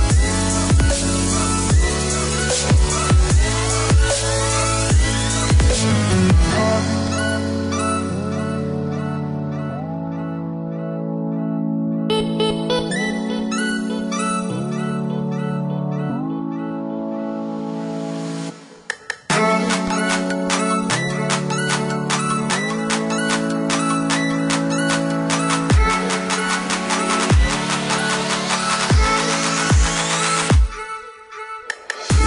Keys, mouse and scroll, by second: 1.7 click, 2.7 ctrl+click, 3.8 click, 4.4 click, 6.6 click, 7.7 click, 9.1 click, 9.8 click, 13.1 click, 16.9 click, 18.1 Escape, 19.1 click, 20.0 space, 20.6 click, 21.3 click, 23.5 click, 25.7 KP_1, 25.9 KP_5, 26.3 KP_Enter, 27.7 click, 28.5 click, 29.3 middle click, 30.4 click, 31.8 space.